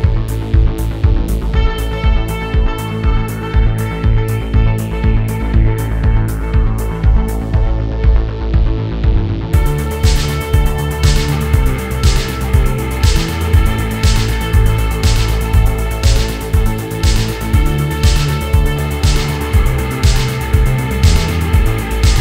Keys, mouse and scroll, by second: 0.1 click, 0.4 middle click, 0.5 click, 0.7 scroll down 1, 0.8 shift+middle click, 1.2-1.5 scroll up 3, 1.3 middle click, 1.5 f, 1.7 click, 2.4 shift+middle click, 2.6 click, 2.9 scroll down 1, 2.9 middle click, 3.1 scroll up 2, 3.2 shift+middle click, 3.7 KP_3, 4.0 shift+middle click, 4.1 f, 4.4 click, 5.2 shift+middle click, 5.3 click, 5.7 shift+middle click, 5.8 click, 6.7 ctrl+z, 6.8-8.0 drag, 8.0 scroll down 2, 8.1 shift+middle click, 8.5-9.3 scroll up 2, 8.5 shift+middle click, 9.7 shift+middle click, 9.7 scroll up 3, 9.9 shift+middle click, 10.0 f, 10.2 click, 10.4 f, 10.5 click, 11.6 click, 12.3 click, 12.5 scroll down 6, 12.6 shift+middle click, 12.8 scroll up 6, 12.9 shift+middle click, 12.9 f, 13.2 click, 14.0 click, 15.3 scroll down 7, 15.3 shift+middle click, 15.6-16.0 scroll up 4, 15.7 shift+middle click, 16.0 f, 16.0 shift+middle click, 16.6 f, 17.0 middle click, 17.1 f, 17.2 middle click, 17.3 click, 17.6 shift+middle click, 17.8 scroll up 1, 17.8 click, 18.1 scroll down 2, 18.1 shift+middle click, 18.3 click, 18.5 f, 18.7 shift+middle click, 19.0 click, 20.1 click, 20.2 scroll down 5, 20.3 shift+middle click, 20.5 scroll up 1, 20.6 click, 21.6 scroll down 6, 21.6 shift+middle click, 21.9 scroll up 3, 22.0 shift+middle click.